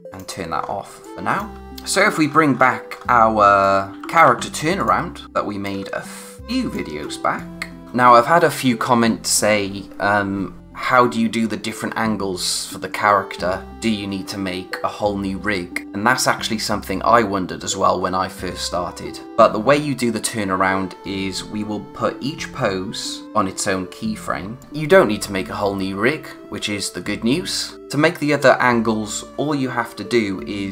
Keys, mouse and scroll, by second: 0.1 click, 0.6 scroll down 1, 0.7 space, 1.0 click, 1.2 space, 1.6 click, 1.9-3.6 scroll up 1, 3.6 click, 3.9-4.2 typing, 4.7 click, 5.5 space, 6.3 click, 7.0 space, 7.3 click, 7.5 space, 24.6 click.